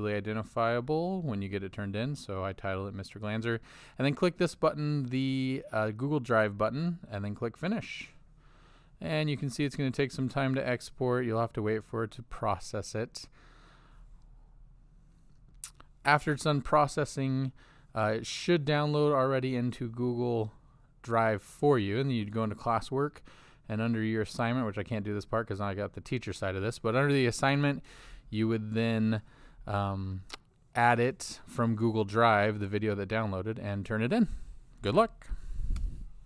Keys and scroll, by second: 0.0-2.4 typing.